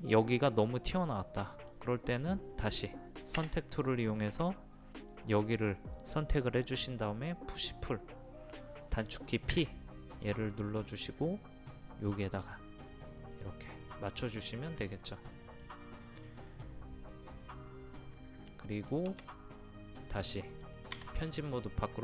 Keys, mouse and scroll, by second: 2.2-2.6 scroll up 1, 5.1 click, 9.5 p, 10.2 click, 13.9-19.1 middle drag, 19.1 space, 20.3 middle click, 20.7 scroll down 1, 20.7 scroll up 1, 21.4 scroll down 1.